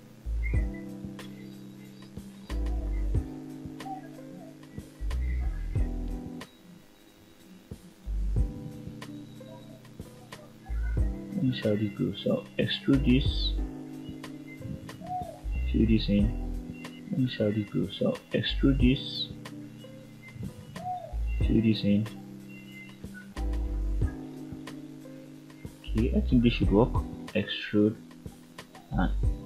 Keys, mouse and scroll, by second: 0.8 click, 3.0-6.0 middle drag, 6.9 click, 7.8 shift+click, 9.9 middle click, 11.3 e, 12.8 click, 14.1 click, 14.3 click, 15.4 f, 15.8-16.2 scroll down 1, 16.2 middle click, 17.6 click, 18.2 middle click, 19.0 click, 20.0 e, 21.0 click, 21.4 middle click, 22.3 e, 23.7 click, 24.4 e, 25.3 click, 26.3 click, 27.2 shift+click, 27.9 f, 29.1 middle click.